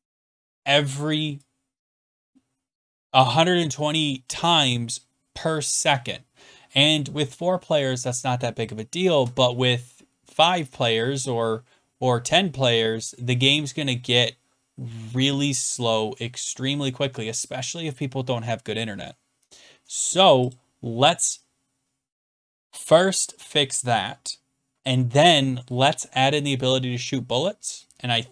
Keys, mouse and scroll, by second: 2.1 click, 20.5 click.